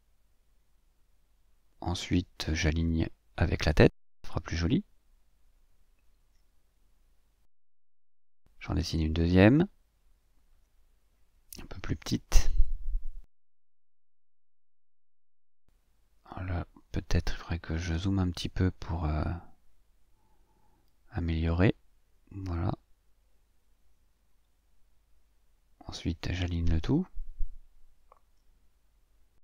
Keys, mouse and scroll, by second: 3.6 shift+click, 4.4-5.6 shift+drag, 5.8 click, 6.7 shift+click, 8.5 click, 9.5 click, 11.5 click, 12.2-14.9 drag, 16.0 click, 16.7-18.8 drag, 19.4-21.3 ctrl+shift+drag, 21.6-23.0 shift+drag, 23.2-23.6 ctrl+scroll up 2, 27.8 click, 28.6 shift+click.